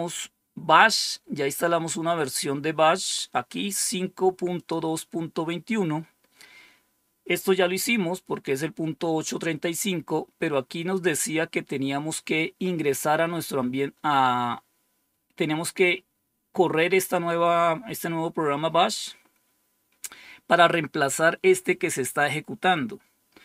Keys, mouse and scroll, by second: 0.9-1.8 scroll down 2, 4.5 click, 6.6 scroll down 2, 9.3-10.1 scroll down 2, 10.5 scroll down 2, 11.1-12.0 scroll down 2.